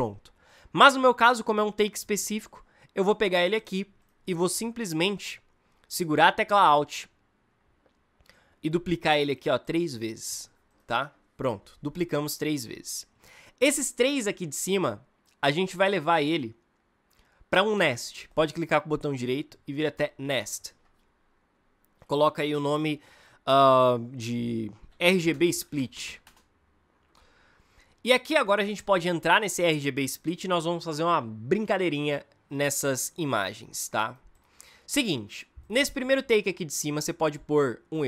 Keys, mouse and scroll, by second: 0.4-3.3 drag, 8.1-11.1 alt+drag, 24.5-26.4 typing.